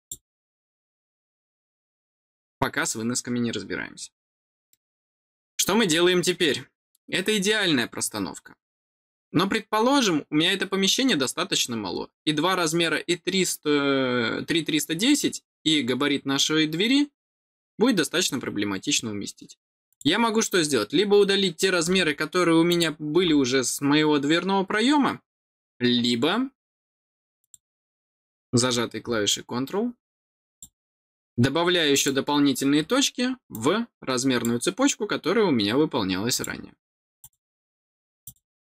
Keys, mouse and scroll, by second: 1.5 middle click, 3.8-4.2 scroll down 2, 4.6 middle click, 19.8 click, 22.6 click, 27.3 click, 30.4 click, 31.9 click, 33.4 click, 36.2 click, 37.1 click, 38.2 click.